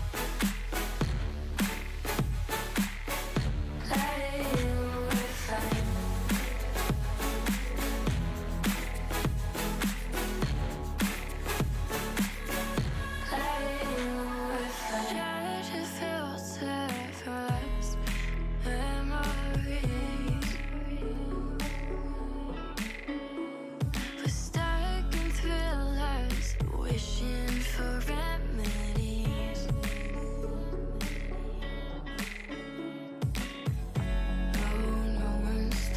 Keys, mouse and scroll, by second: 4.9 scroll, 5.1 middle click, 7.9 middle click, 9.9 click, 16.2-16.5 middle drag, 17.2-18.4 shift+middle drag, 22.5-23.8 drag, 22.5 middle click, 25.0-26.3 drag, 25.0 middle click, 26.3 Tab.